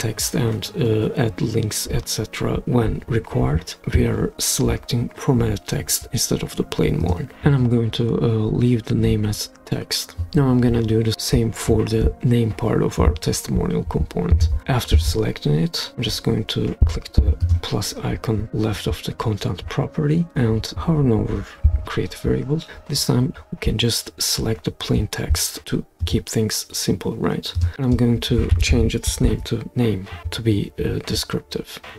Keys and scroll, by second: 28.3-29.8 typing.